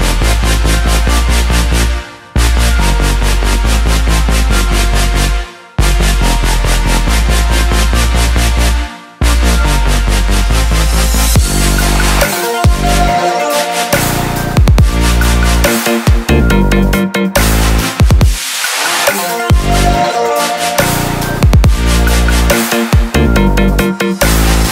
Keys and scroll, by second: 1.7 ctrl+j.